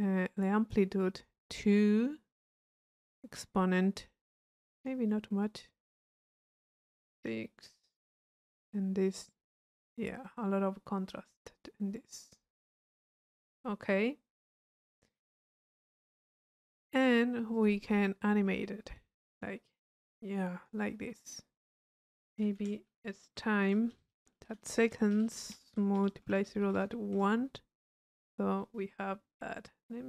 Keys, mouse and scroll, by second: 2.5-5.1 drag, 5.4-6.7 drag, 9.1-13.3 drag, 17.5-21.1 drag, 21.2-22.3 drag.